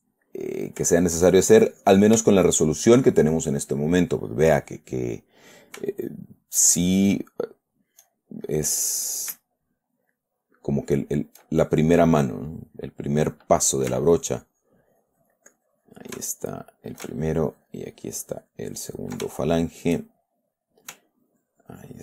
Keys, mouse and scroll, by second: 0.3 middle click, 1.3 shift+middle click, 1.9 shift+click, 2.7 shift+middle click, 3.4 shift+middle click, 4.2 middle click, 4.9 middle click, 6.8 shift+click, 7.6 shift+click, 7.9 shift+click, 8.9 shift+middle click, 9.8 shift+middle click, 10.5-11.9 shift+middle drag, 12.5 middle click, 14.4-16.5 ctrl+drag, 16.7 ctrl+shift+middle click, 17.6-19.7 ctrl+shift+drag, 19.7 ctrl+shift+middle click, 20.5 shift+middle click, 21.5-22.0 ctrl+drag.